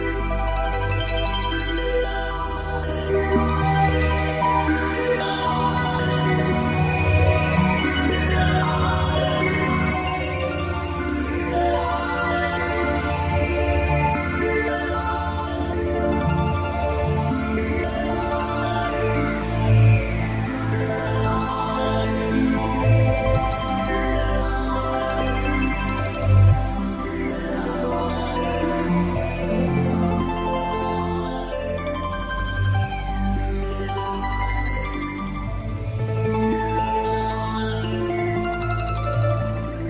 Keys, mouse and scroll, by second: 1.6 n, 3.1 click, 4.9 middle click, 11.3 click, 12.1 click, 13.7 click, 14.8 click, 17.7 s, 19.3 click, 20.2 s, 21.4 click, 21.8 t, 26.0 click, 28.5 click, 35.5 click.